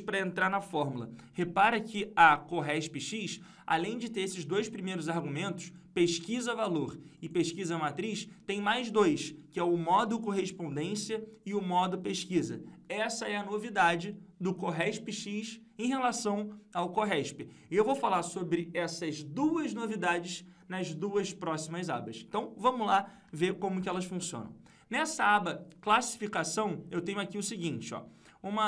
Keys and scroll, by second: 0.5 F2, 23.7 ctrl+Page_Down.